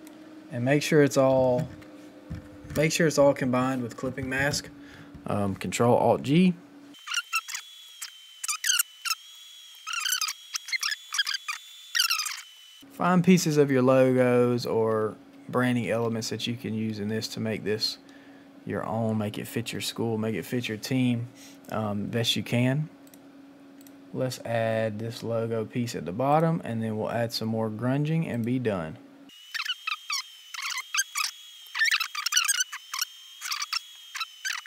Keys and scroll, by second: 7.2 ctrl+alt+g, 8.7 ctrl+t, 9.3 Return, 9.7 ctrl+c, 10.7 ctrl+alt+j, 15.4 shift+Right, 17.2 shift+Down, 29.9 ctrl+c, 30.8 Delete, 31.9 ctrl+t, 32.2 Return, 32.5 Return, 33.9 x.